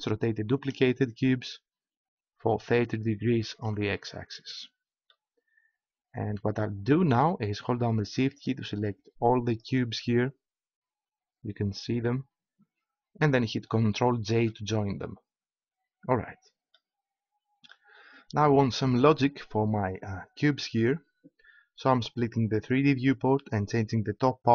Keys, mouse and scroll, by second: 3.9-6.9 drag, 8.3-11.2 right drag, 14.3 ctrl+j, 17.7-18.9 middle drag, 22.7-24.5 drag.